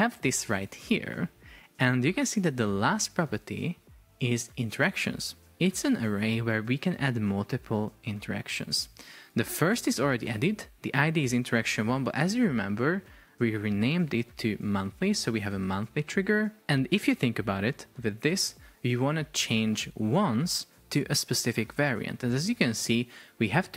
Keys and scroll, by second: 16.1 Return.